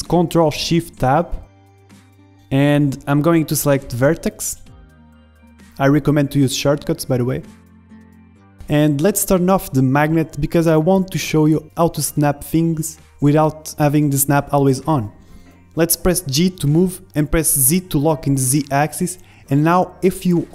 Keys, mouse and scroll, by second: 6.4-7.8 middle drag, 7.6 g, 8.4-10.0 middle drag, 9.8 ctrl+z, 10.2 g, 12.0-15.6 drag, 12.8 ctrl+z, 15.9 g.